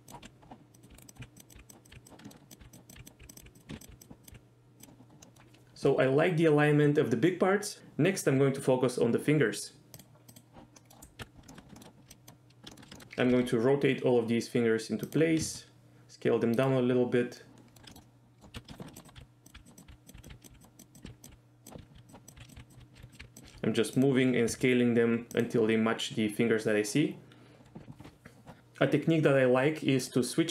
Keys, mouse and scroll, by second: 0.0-4.3 typing, 0.7 click, 1.0 right click, 1.1 click, 1.3 click, 1.7 click, 1.8 click, 2.0 click, 2.2 shift+middle click, 2.9 click, 3.0 click, 3.3 click, 3.5 click, 3.7 ctrl+z, 3.8 click, 4.2 click, 5.2 middle click, 10.0 click, 10.3 click, 10.8 middle click, 11.2 KP_1, 11.5 shift+middle click, 11.8 shift+middle click, 12.1 click, 12.7 shift+middle click, 12.9 shift+middle click, 13.3 r, 15.1 click, 15.4 s, 16.6 click, 17.4 middle click, 17.9 shift+middle click, 18.0 middle click, 18.5-23.4 typing, 19.0 click, 19.4 click, 19.6 click, 21.6 click, 22.1 click, 22.5 click, 23.1 click, 24.0 click, 24.5 s, 25.3 click, 30.0-30.5 drag.